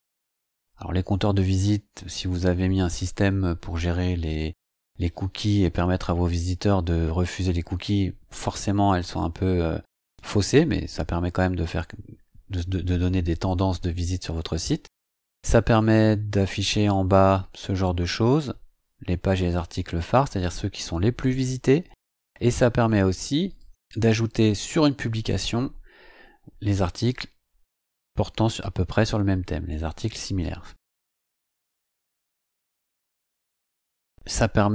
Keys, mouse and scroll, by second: 5.3-14.5 scroll down 2, 14.5-19.1 scroll down 13, 21.9-22.6 scroll up 4, 23.5 click, 25.0-34.7 scroll down 3.